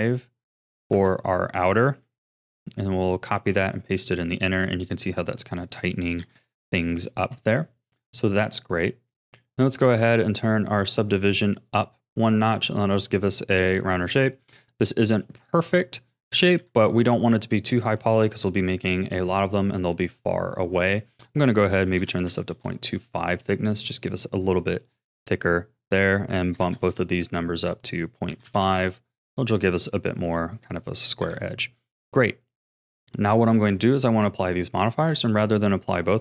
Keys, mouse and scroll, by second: 2.2 ctrl+c, 3.4 ctrl+v, 6.2 KP_1, 7.1 shift+middle click, 8.0-9.2 drag, 11.6-13.5 drag, 13.5-14.6 middle drag, 14.6-15.2 scroll up 3, 15.2-16.6 middle drag, 16.6 KP_1, 17.3-17.7 scroll down 3, 17.7-18.9 shift+middle drag, 18.9-23.3 drag, 23.3-25.8 middle drag, 25.8-29.5 drag, 29.5-31.2 middle drag, 31.2 KP_1, 31.7 scroll down 2, 33.5-36.2 drag.